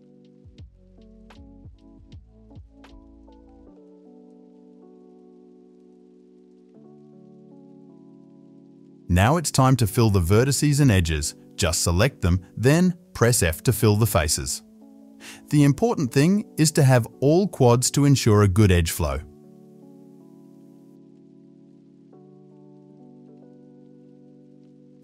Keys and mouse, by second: 0.0 shift+click, 0.8 middle click, 0.9-3.0 drag, 2.1 s, 3.0 shift+middle click, 3.2 click, 3.3-7.6 shift+middle drag, 4.0 s, 6.3 s, 7.6 click, 7.8-9.7 ctrl+middle drag, 8.3 x, 9.7 click, 10.7 f, 12.0 f, 12.6 2, 12.7 click, 13.0-13.6 f, 13.8 f, 14.1 ctrl+z, 15.5 ctrl+r, 16.0 ctrl+z, 16.6 1, 17.0 ctrl+r, 17.9 g, 18.6 ctrl+r, 19.1-20.9 typing, 20.0 click, 22.1-23.4 typing, 23.3 click, 24.6 shift+f, 24.7 shift+click, 24.8 middle click.